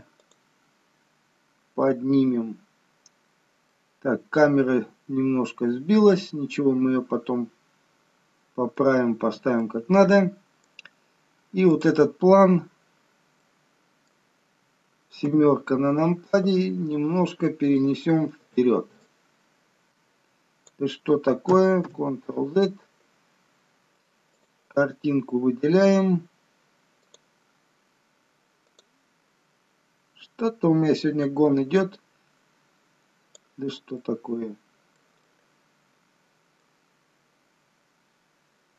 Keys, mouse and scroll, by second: 3.8 middle click, 9.3-9.9 scroll down 2, 9.9 middle click, 12.0 click, 13.5 middle click, 15.5 KP_7, 17.9 click, 19.2 click, 22.2 ctrl+z, 24.5 click, 32.0 click, 34.2 middle click, 35.5 middle click, 37.1-38.0 scroll up 2, 38.0 scroll up 1, 38.2 scroll down 1.